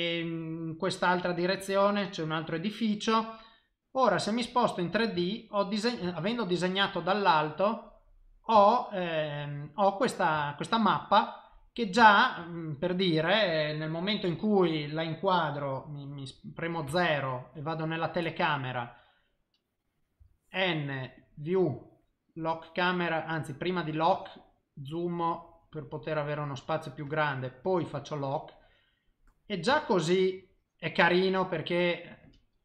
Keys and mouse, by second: 1.1 click, 1.6 click, 2.3 click, 3.5 middle click, 5.3 ctrl+middle click, 6.1 shift+middle click, 6.7 middle click, 8.6 shift+middle click, 9.0 middle click, 10.4 shift+middle click, 10.7 middle click, 12.0 shift+middle click, 14.4 middle click, 14.5 shift+middle click, 16.8 KP_0, 24.1 click, 27.6 click, 28.6 middle click, 29.7 shift+middle click, 31.3 click.